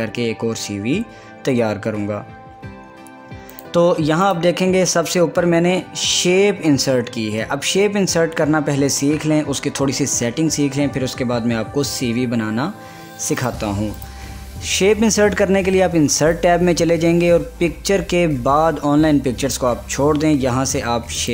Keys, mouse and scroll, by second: 3.6 click, 4.5 click, 13.5 click, 14.1 click, 16.3 click.